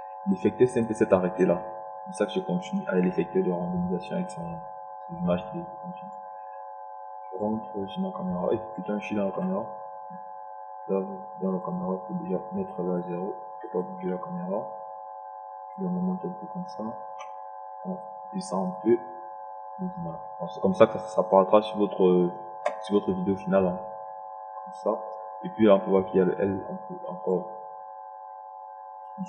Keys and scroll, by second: 15.8 KP_0.